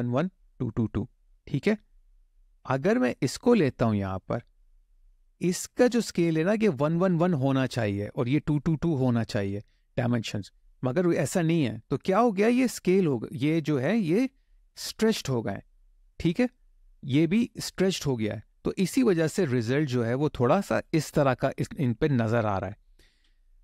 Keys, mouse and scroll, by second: 3.3 click, 13.4 middle click, 16.5 click, 19.5 Tab, 20.5 click, 22.9 Tab.